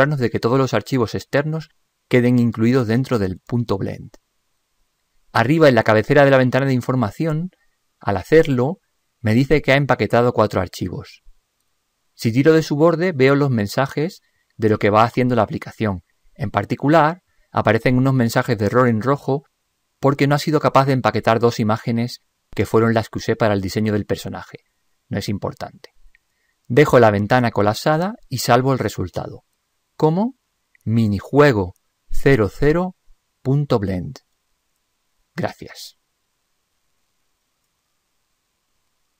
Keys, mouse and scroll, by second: 12.9-14.9 drag, 37.5-39.1 drag, 37.5 0.